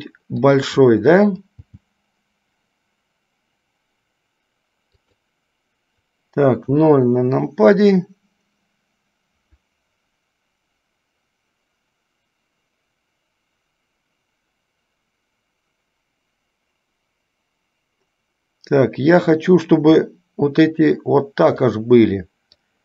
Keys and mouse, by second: 1.8 g, 6.8 KP_0, 19.9 s.